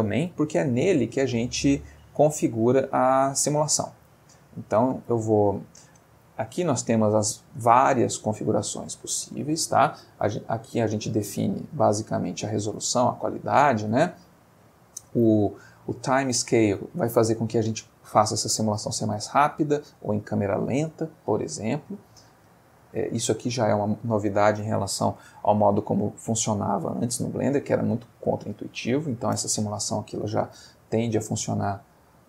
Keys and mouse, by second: 0.5-1.4 middle drag, 2.9 click, 3.8 click, 5.3-5.9 middle drag, 6.3 middle click, 7.2 middle click, 22.3-23.3 middle drag, 31.8 middle click.